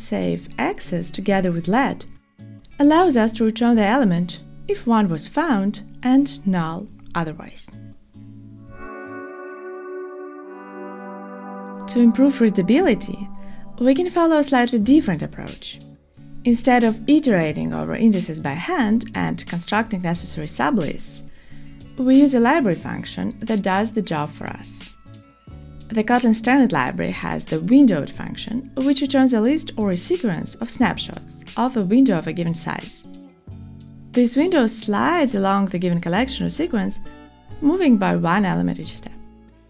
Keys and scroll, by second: 4.1 alt+super+l, 5.4 alt+shift+Right, 30.0 shift+super+Return, 32.2 Return, 32.8 super+d, 34.3 ctrl+shift+r.